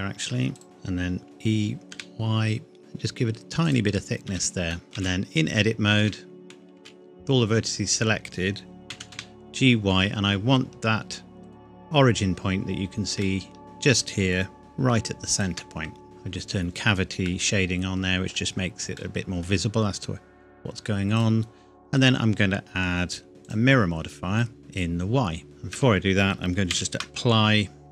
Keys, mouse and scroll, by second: 0.6 alt+click, 0.6-1.2 scroll up 1, 1.2 e, 1.9 y, 3.6 click, 4.3 Tab, 4.7 middle click, 4.8 click, 5.0 a, 6.0 Tab, 6.8 a, 8.9 g, 9.2 y, 11.4 shift+click, 12.6 scroll up 1, 13.3 shift+middle click, 13.6-14.4 scroll up 1, 14.6 shift+y, 15.4 shift+click, 16.0 scroll down 1, 16.0 click, 17.3 middle click, 17.6-18.5 scroll up 1, 19.0 middle click, 21.2 click, 23.4 click, 25.4 Tab, 26.7 ctrl+a, 27.8 click.